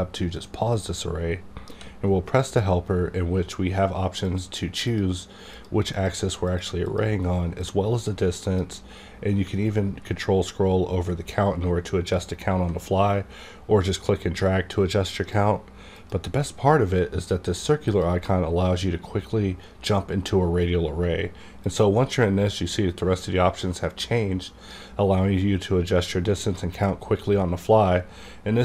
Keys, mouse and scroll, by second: 1.7 d, 4.9-9.9 drag, 9.8 ctrl+scroll down 1, 10.2-10.7 ctrl+scroll up 1, 10.7-11.1 ctrl+scroll down 1, 11.1 ctrl+scroll up 1, 11.3 ctrl+scroll down 1, 11.7-12.1 ctrl+scroll up 1, 12.1-12.8 ctrl+scroll down 1, 12.8 ctrl+scroll down 1, 12.8-17.9 drag, 21.6-28.6 drag.